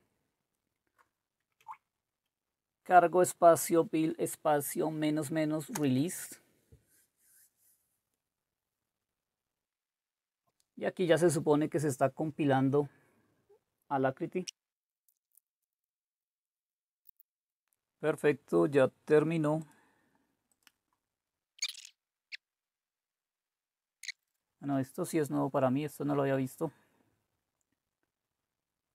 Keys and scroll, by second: 1.6 Right, 5.8 Return.